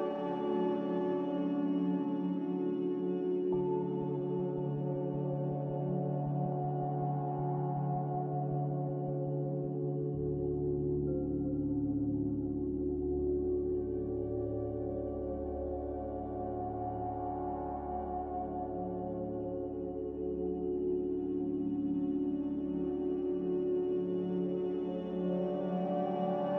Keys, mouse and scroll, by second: 1.7-2.6 typing, 4.6-5.4 typing, 7.2-9.8 typing, 13.6 1, 14.1 BackSpace, 14.4 7, 15.8 BackSpace, 15.9 BackSpace, 15.9 BackSpace, 16.3 5, 16.6 Return, 19.0 typing, 22.8 Return, 24.5 Delete.